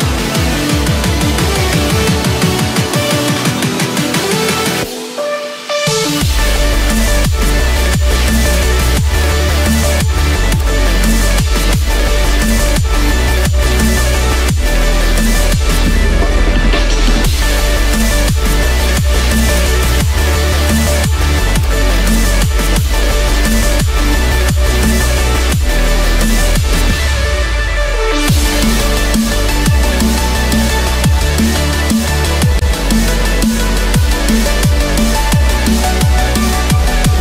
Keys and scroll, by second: 19.0 ctrl+-, 21.8 ctrl+-, 23.1 ctrl+=.